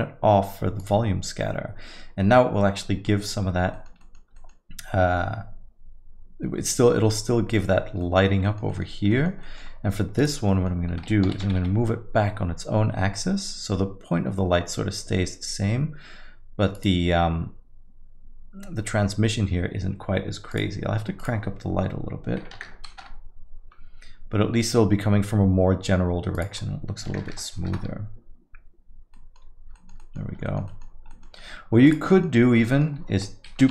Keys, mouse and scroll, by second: 3.1 click, 3.1 middle click, 3.4 scroll up 2, 3.7 alt+middle click, 4.0 middle click, 4.4 alt+middle click, 8.0 middle click, 8.2 scroll down 2, 8.7 middle click, 8.8 scroll down 2, 9.1 alt+middle click, 9.4 middle click, 9.6 scroll down 1, 10.2 click, 10.5 middle click, 11.3 g, 20.5 click, 21.2 click, 26.3 click, 27.3 KP_0, 29.1 middle click, 29.6 scroll down 2, 29.7 alt+middle click, 30.0 middle click, 30.5 alt+middle click, 30.6 middle click, 30.9 scroll down 2, 31.1 middle click, 31.4-32.0 scroll up 3, 31.9 click, 32.1 alt+middle click, 32.5-32.8 scroll up 2, 32.6 middle click, 33.6 shift+d.